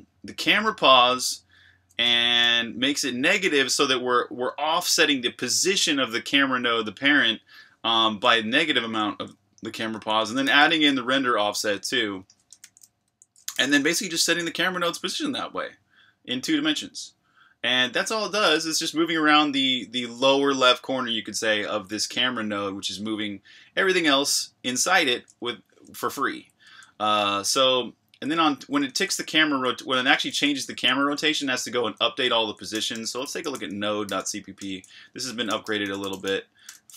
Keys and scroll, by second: 2.0 Escape, 2.1 k, 8.9 Escape, 9.9-10.9 typing, 12.4-13.5 typing, 18.0 Escape, 18.2 k, 25.4 Escape, 26.6 j, 27.7-36.9 typing.